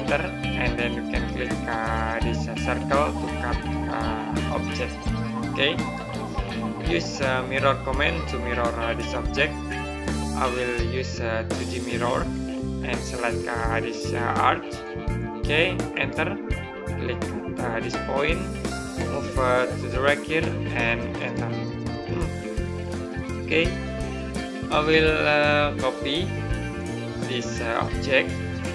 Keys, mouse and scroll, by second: 4.0 click, 5.6 right click, 10.1 click, 15.8 right click, 19.1 click, 21.0 right click, 23.3-23.6 scroll down 1, 23.6 middle click, 26.5 click.